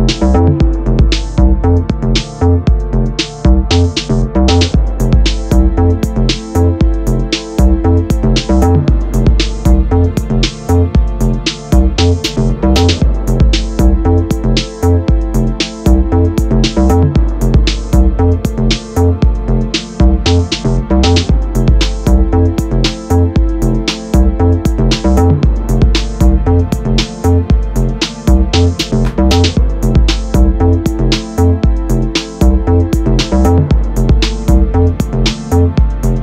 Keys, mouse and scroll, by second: 4.6-8.7 drag, 9.2-11.4 drag, 13.6-27.0 drag, 28.9-36.2 drag.